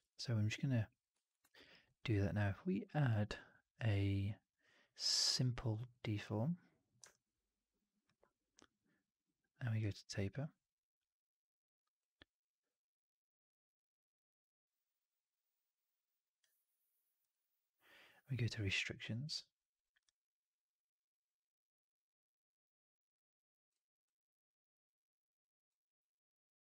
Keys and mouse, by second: 1.1 alt+drag, 1.4 alt+middle drag, 1.5 alt+right drag, 1.7 alt+click, 2.9-5.9 drag, 7.0-7.9 alt+drag, 9.7 click, 12.0-16.4 drag, 17.1 click, 19.9-23.6 drag, 24.0-25.6 drag.